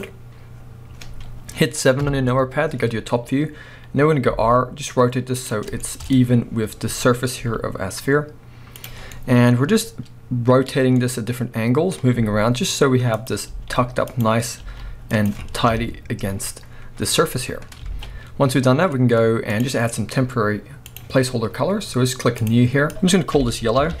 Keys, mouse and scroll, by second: 0.0 click, 0.5-2.0 scroll down 1, 2.0 KP_7, 2.8 scroll up 1, 4.3 r, 5.5 click, 5.8-8.9 shift+middle drag, 6.1-7.3 scroll up 2, 7.3 scroll up 1, 7.3 g, 8.9 click, 9.0 scroll down 2, 9.1-13.3 middle drag, 10.7-11.0 scroll up 2, 12.2 r, 13.3 click, 13.5 g, 14.2 click, 14.6 r, 15.3 click, 15.7 KP_1, 16.6-17.6 scroll down 1, 17.6 scroll up 1, 17.9 alt+a, 19.5 click, 20.9 click, 21.3-22.4 scroll up 1, 22.4-24.0 drag.